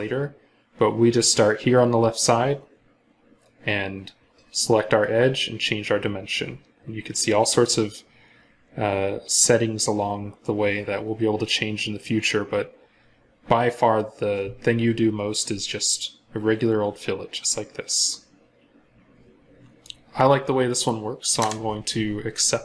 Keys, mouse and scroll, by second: 10.9 scroll up 1, 11.5 scroll down 1, 11.8 scroll up 1, 12.7 scroll down 1, 21.2 Return, 22.5 scroll up 1.